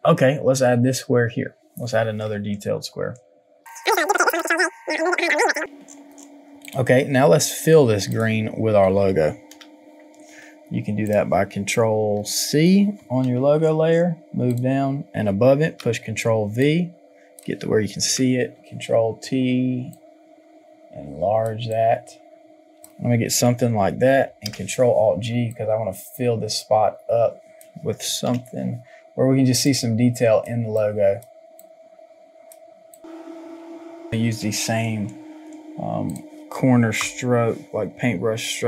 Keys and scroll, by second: 4.3 ctrl+j, 23.3 Return, 28.2 ctrl+t, 37.0 ctrl+j.